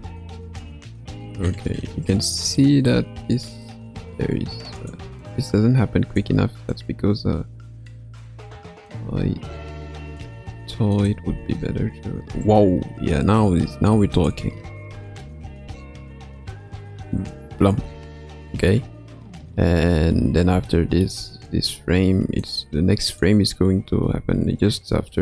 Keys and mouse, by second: 2.7 middle click, 3.6-4.9 drag, 5.3-6.2 drag, 6.7 click, 7.1-9.0 drag, 9.8-11.1 drag, 11.3 space, 12.3 space, 14.1 click, 14.9 space, 17.8 space, 20.7-21.1 shift+middle drag, 22.4-23.3 drag, 25.1-25.2 shift+middle drag.